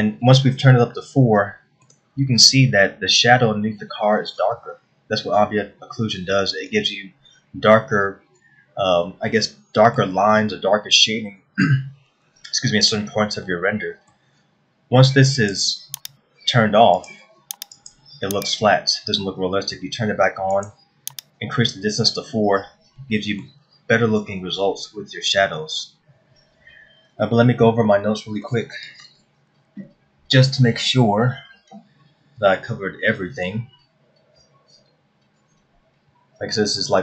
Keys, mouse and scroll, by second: 0.6 scroll up 2, 1.4 shift+middle click, 2.9 scroll up 1, 10.1 middle click, 14.0 middle click, 16.0 click, 18.4 click, 21.4 click, 23.6 middle click, 26.8 scroll down 1.